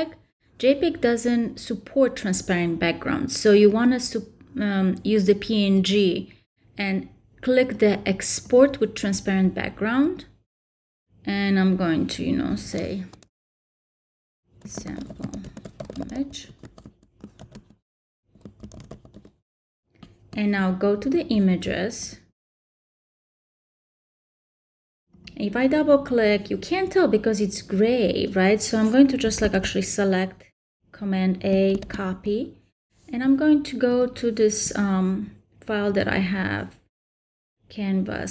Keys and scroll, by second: 14.6-16.6 typing, 19.1 Return, 29.4 super+a, 31.7 super+c.